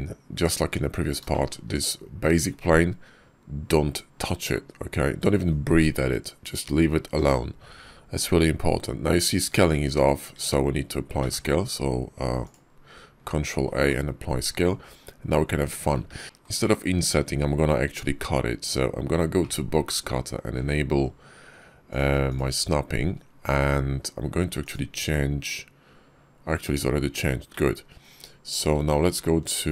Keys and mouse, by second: 0.2 click, 0.5 Tab, 1.2 shift+click, 10.2 Tab, 11.0 ctrl+a, 13.1 Tab, 15.6 Tab, 15.9 `, 19.2 alt+w, 21.7 click, 22.1 click, 24.9-26.3 drag, 29.4 shift+v.